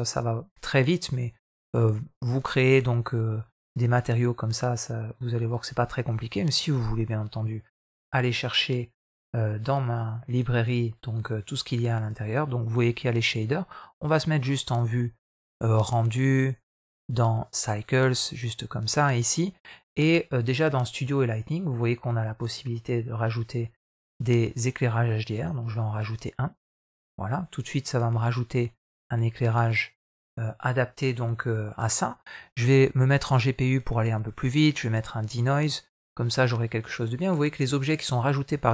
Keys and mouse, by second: 0.0-2.2 drag, 5.8 click, 8.9-11.5 drag.